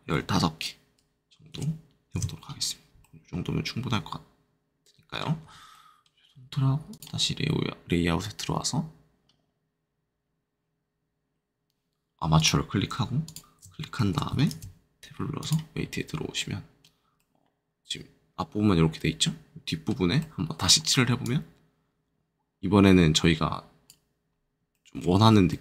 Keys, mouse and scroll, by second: 0.0 1, 1.5 5, 2.1 Return, 3.0 middle click, 5.7 middle click, 6.9 click, 12.3 click, 13.2 shift+click, 14.5 ctrl+shift+Tab, 15.3 click, 16.3-21.2 middle drag, 21.2 click, 24.3 middle click, 24.7 shift+middle click, 25.1 shift+middle click, 25.4 middle click.